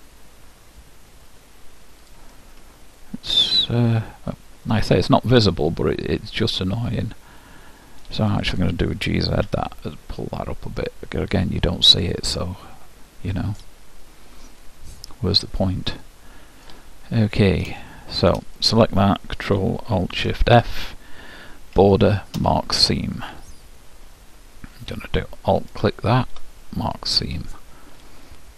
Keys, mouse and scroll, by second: 2.4-4.3 middle drag, 8.4-10.2 drag, 9.2 g, 12.5-14.4 middle drag, 14.7-16.6 middle drag, 17.2-18.7 middle drag, 18.7-20.4 drag, 21.8 ctrl+alt+shift+', 25.8-27.5 drag.